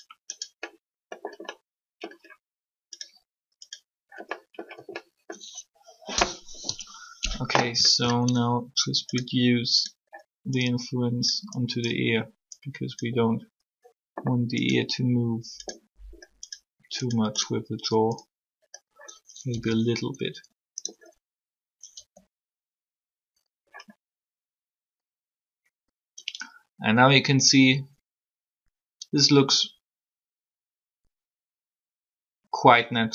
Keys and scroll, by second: 6.5 3, 19.5 r, 22.0 r.